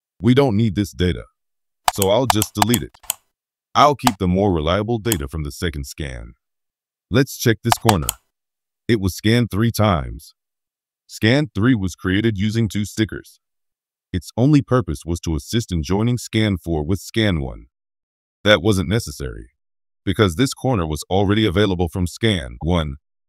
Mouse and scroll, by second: 1.8 click, 2.2 click, 2.6 click, 2.9 click, 4.0-5.0 right drag, 7.7 middle click, 7.9 middle click, 8.5-9.5 scroll up 3, 9.8 middle click.